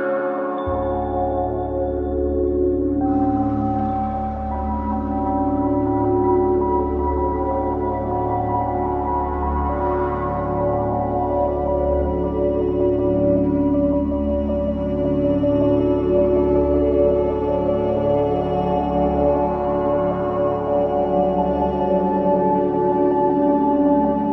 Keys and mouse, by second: 2.3 KP_1, 3.1 KP_3, 5.2 s, 7.4-9.0 drag, 7.6 g, 9.0 s, 13.8 click, 16.8-18.3 drag, 18.3 r, 20.0 click, 20.3 g.